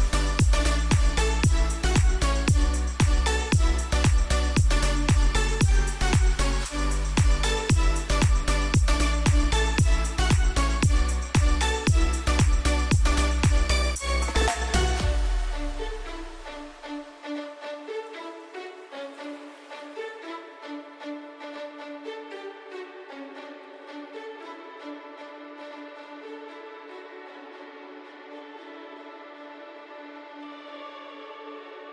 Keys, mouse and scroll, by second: 1.7 ctrl+t, 2.9 alt+shift+click, 13.1 alt+scroll up 1, 15.2 Left, 16.7 click, 17.5 Left, 19.2 right click, 20.3-27.5 drag, 27.5 v.